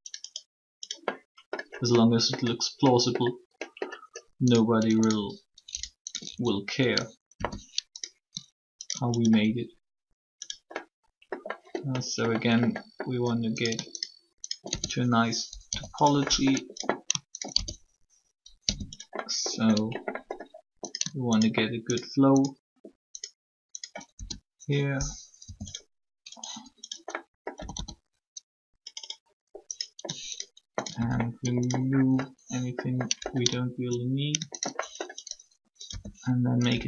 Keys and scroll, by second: 7.3 shift+f, 15.5 shift+0, 18.5 shift+0, 25.4 shift+0, 27.5 typing, 35.8 shift+r, 36.7 s.